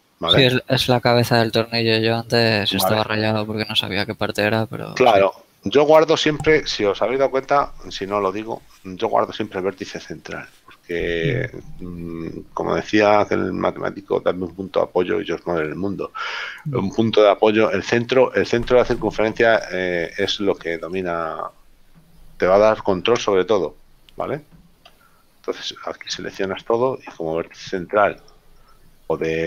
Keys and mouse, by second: 2.6 middle click, 20.9 right click, 23.2 KP_7, 24.9 a, 25.9 middle click, 28.3 shift+right click.